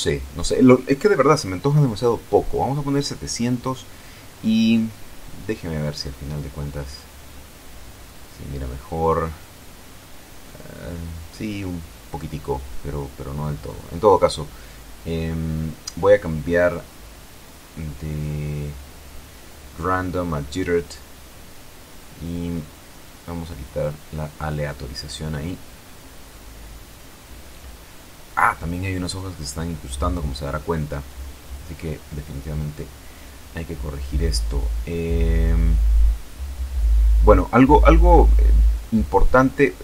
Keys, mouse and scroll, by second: 1.4 Home, 2.1 KP_7, 2.6 Delete, 2.8 Return, 6.5 F12, 17.3 Escape, 19.9 click, 22.8 click, 24.9 F12, 35.8 Escape, 39.0 click.